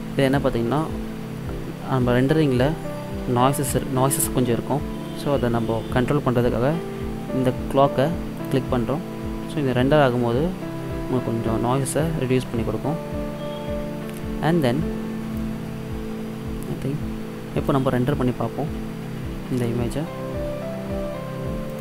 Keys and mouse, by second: 8.4-10.4 drag, 15.5-17.3 drag, 21.7 click.